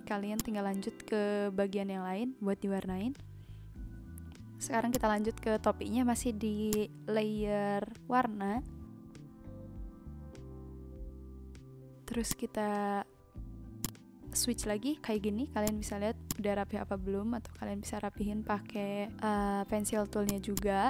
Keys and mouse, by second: 0.3 click, 4.9 click, 5.8 b, 6.7 click, 12.2 click, 13.8 click, 15.6 click, 17.8 n, 20.2 click.